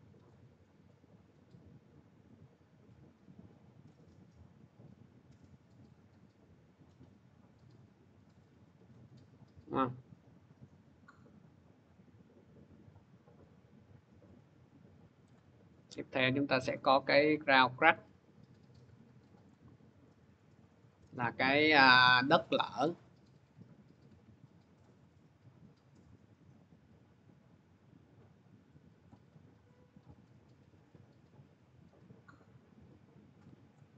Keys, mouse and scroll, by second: 9.3-11.7 drag, 15.1 click, 16.4 click, 19.3 click, 22.6 click, 24.6 click, 28.9 click, 33.5 click.